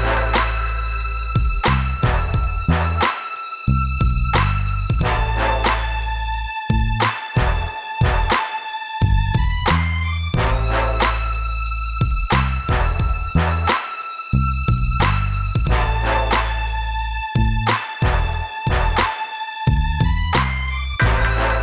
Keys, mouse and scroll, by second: 0.0 click, 0.1 click, 2.2 click, 2.6 Delete, 3.0 scroll down 2, 6.4 middle click, 7.4 click, 9.0 Delete, 9.3 click, 9.5 click, 9.6 click, 9.9 Delete, 10.2 middle click, 11.9 click, 12.0 click, 13.1 middle click, 15.6 scroll up 2, 16.3-16.8 scroll up 1, 16.8 click, 16.9 click, 17.8 click.